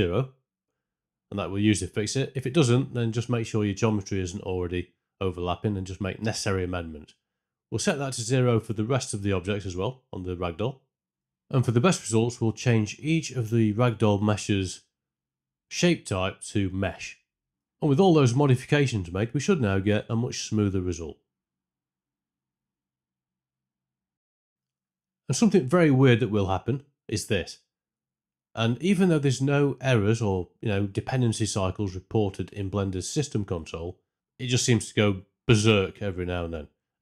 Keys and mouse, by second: 0.3 space, 1.4 space, 1.7 shift+Left, 5.3-6.6 right drag, 9.1 alt+click, 15.2-16.8 alt+drag, 19.0 space, 20.9 space, 21.4 shift+Left, 21.7 space, 23.6 space, 23.9 shift+Left, 25.8 shift+Left, 26.2 space, 27.3 space, 27.6 shift+Left, 28.0 space, 28.8 space, 29.1 shift+Left, 35.8 click.